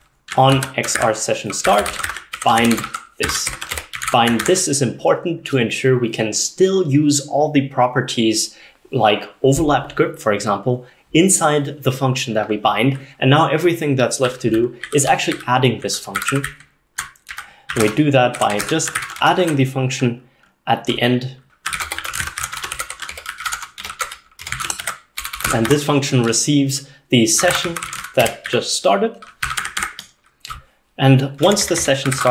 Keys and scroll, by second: 0.0-4.6 typing, 14.9-19.9 typing, 21.5-32.3 typing, 23.5 ctrl+alt+7, 23.5 ctrl+alt+0.